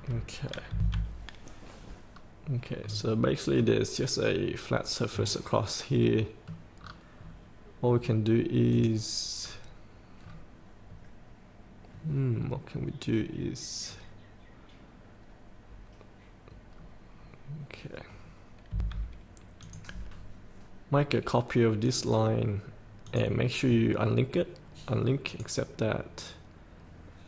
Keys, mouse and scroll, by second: 0.1 scroll down 1, 0.8 F8, 2.3 scroll up 1, 3.0-6.9 middle drag, 7.0 scroll down 1, 8.9 click, 9.6 scroll up 1, 11.0 scroll down 1, 13.1 scroll up 1, 14.0 scroll down 2, 17.0 scroll up 1, 17.4 scroll down 1, 18.9 F8, 19.8 click.